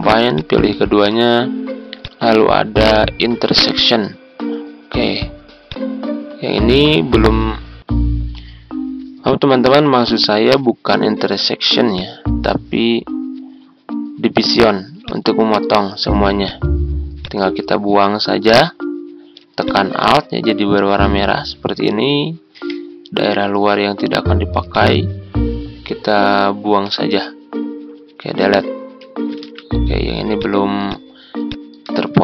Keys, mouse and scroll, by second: 0.2 shift+click, 2.0-6.7 drag, 7.3 ctrl+z, 8.1 click, 10.0 shift+click, 13.6-18.5 drag, 19.5 alt+click, 22.6 Delete, 24.6-26.9 alt+drag, 28.3 Delete, 29.4 ctrl+z, 30.3 click, 32.0 ctrl+z.